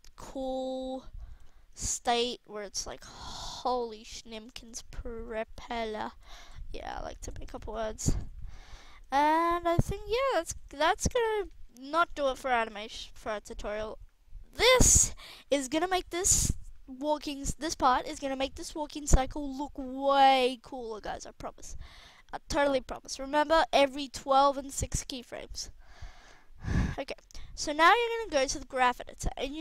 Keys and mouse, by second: 0.3 right click, 1.6-2.6 middle drag, 5.4 g, 6.2 a, 6.3 a, 6.8 i, 7.4-8.0 drag, 8.0 alt+a, 8.5-8.8 middle drag, 10.4 alt+a, 11.5 alt+a, 12.1 alt+a, 17.3 KP_1, 17.7 alt+a, 20.0 alt+a, 21.3 click, 21.6 click, 27.0-29.6 middle drag.